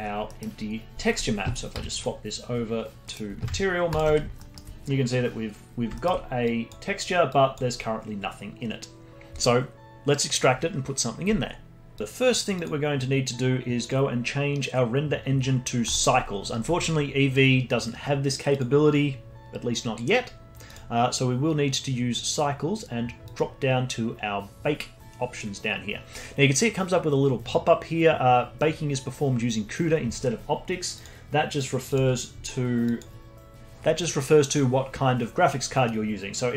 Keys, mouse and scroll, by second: 0.3 middle click, 0.9 z, 1.7 z, 2.4-3.0 scroll down 1, 3.0-4.0 middle drag, 4.0 ctrl+shift+drag, 4.4 alt+middle drag, 5.7 scroll down 1, 5.9 alt+middle click, 6.5 click, 7.3 click, 12.6 click, 13.8-16.9 drag, 18.5-24.6 drag, 24.6-25.5 scroll down 2, 25.5-27.9 scroll down 1, 30.9-33.5 drag.